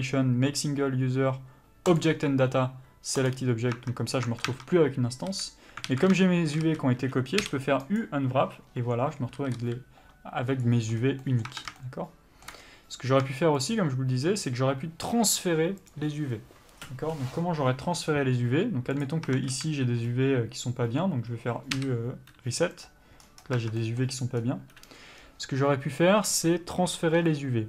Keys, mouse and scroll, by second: 4.1 Tab, 5.6 a, 6.2 alt+a, 6.5 shift+middle click, 6.9 a, 7.1-8.3 scroll up 1, 8.3 u, 9.6 a, 10.8 s, 11.3-11.6 scroll down 1, 11.6 middle click, 11.8 Tab, 12.1 shift+middle click, 12.9-14.0 scroll down 1, 14.0 shift+click, 16.3 click, 19.6 Tab, 19.8 a, 23.1 u, 24.0 Tab, 24.1 middle click, 24.7-25.5 scroll up 1, 25.5 scroll down 1.